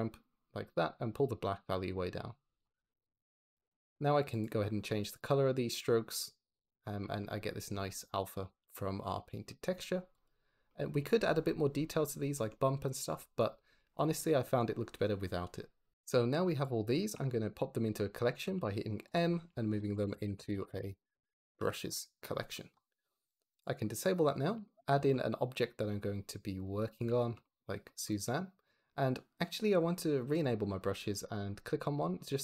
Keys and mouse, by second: 0.6-2.5 drag, 5.0 click, 7.6 shift+middle drag, 8.5 ctrl+z, 10.0 click, 10.6 click, 12.1 shift+middle click, 12.9 shift+middle click, 14.1-14.4 shift+middle drag, 15.9 click, 16.7 shift+middle drag, 18.4 m, 19.4 shift+middle click, 21.8 Return, 23.4 click, 23.9 click, 24.8 shift+a, 30.2 click, 30.8 click.